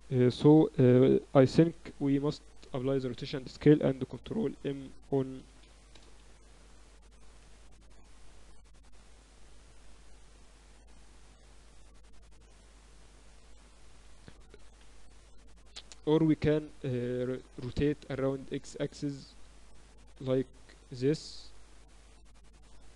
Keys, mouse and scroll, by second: 1.8 ctrl+a, 4.3 y, 5.7 y, 6.0 Return, 6.3 Escape, 7.6 r, 14.7 r, 16.4-18.5 middle drag, 18.5-20.3 drag, 20.1 r, 21.9 click.